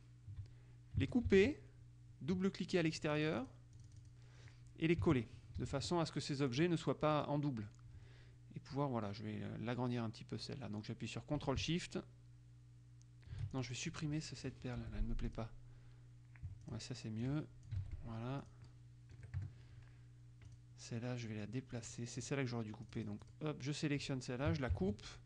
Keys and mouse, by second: 1.4 ctrl+x, 2.9-4.7 drag, 5.7 ctrl+alt+v, 6.6 click, 13.7 ctrl+shift+click, 15.0 Delete, 15.5 click, 16.8-18.3 drag, 17.9 ctrl+z, 18.6 click, 19.3 KP_Subtract, 19.5 KP_Add, 20.7 click, 21.9-22.9 drag, 24.9 ctrl+x.